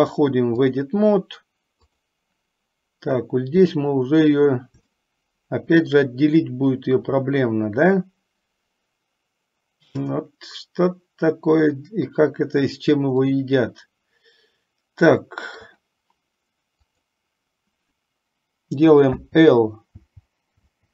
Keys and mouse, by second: 5.1-6.3 shift+middle drag, 13.4-15.8 middle drag, 17.0 click, 19.4-20.9 typing.